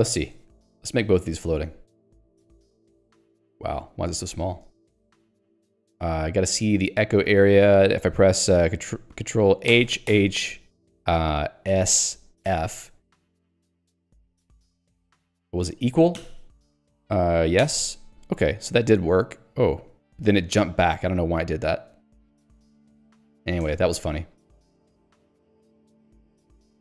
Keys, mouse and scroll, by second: 1.8 click, 23.8 click, 24.4 click, 25.7 Escape, 26.0 q, 26.4 Escape.